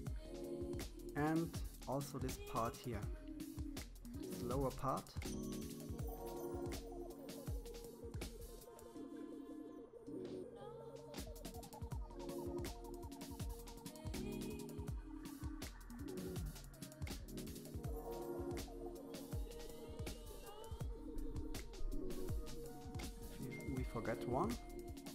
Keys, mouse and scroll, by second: 9.1-9.6 scroll down 3, 9.6-11.2 middle drag, 12.1 KP_1, 13.5 shift+z, 14.3 shift+middle click, 15.3-16.1 scroll up 3, 16.1-16.8 scroll down 4, 16.8-17.9 shift+middle drag, 17.9-18.4 scroll up 4, 18.4 middle click, 19.0-19.6 scroll down 5, 19.6-20.8 shift+middle drag, 20.8-22.7 scroll up 5, 22.7 shift+click, 23.4-23.9 scroll down 6.